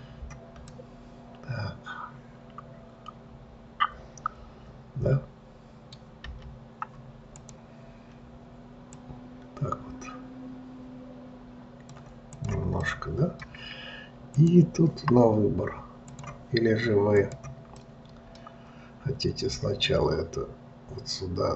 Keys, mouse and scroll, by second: 1.1-4.1 middle drag, 9.3 click, 12.7 click, 13.2-14.7 middle drag, 14.7 click, 16.4 click, 17.5 click, 18.1-20.2 middle drag, 20.2 click.